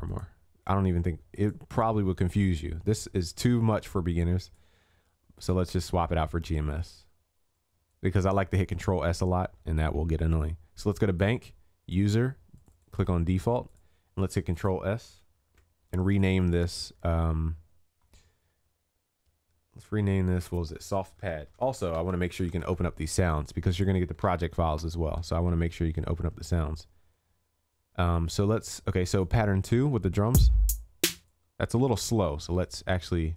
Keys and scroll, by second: 15.5 ctrl+s, 24.2 ctrl+s.